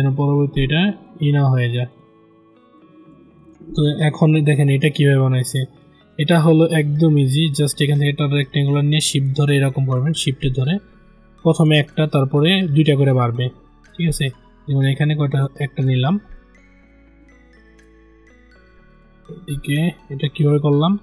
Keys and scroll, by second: 20.8 ctrl+z.